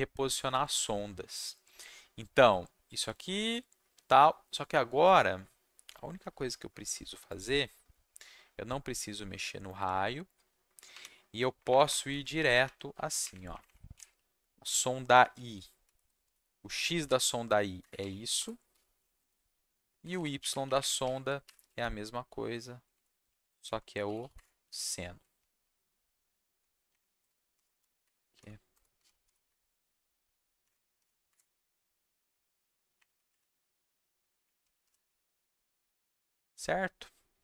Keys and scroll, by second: 11.5 Up, 11.7 Up, 12.1 Down, 12.1 Right, 12.3 Down, 12.4 Right, 12.6 Right, 13.2 Up, 14.1 shift+Left, 15.3 shift+Left, 15.4 shift+Left, 15.8 shift+Right, 16.2 ., 17.8 Escape, 18.3 BackSpace, 18.7 /, 19.3 ctrl+shift+Down, 19.9 Down, 20.0 Down, 20.1 Down, 20.4 Up, 21.6 Left, 22.9 Left, 23.5 shift+Left, 23.7-24.7 typing, 25.6 Right, 26.9 Up, 27.2-29.2 typing, 28.0 Escape, 28.2 Down, 28.3 Left, 29.4 Escape, 30.9 y, 31.3 Escape, 32.1 Down, 32.9 shift+Up, 34.2 Down, 34.4 shift+Up.